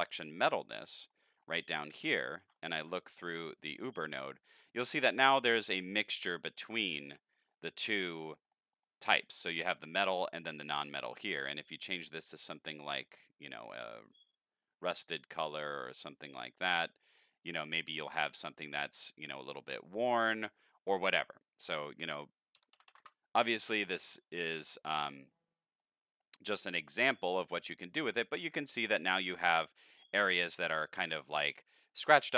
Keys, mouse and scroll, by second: 0.9 middle click, 1.4 scroll up 4, 2.7 ctrl+shift+click, 3.4-3.9 drag, 4.4-5.0 middle drag, 5.4 scroll up 1, 5.7 middle click, 6.7-7.8 middle drag, 8.2 middle click, 8.2 scroll down 3, 8.9 middle click, 11.5 click, 11.6-12.3 middle drag, 12.3 click, 12.9 click, 14.0 click, 15.2-16.2 drag, 16.7 middle click, 17.3 scroll up 3, 17.6 middle click, 19.5 middle click, 19.9 middle click, 20.4 middle click, 21.0 click, 23.4 middle click, 24.1 middle drag, 24.4 middle click, 24.8 middle click, 25.0 scroll up 1, 25.3-25.8 middle drag, 26.4-26.8 middle drag, 27.2 middle click, 27.3 scroll up 1, 31.1-31.4 middle drag.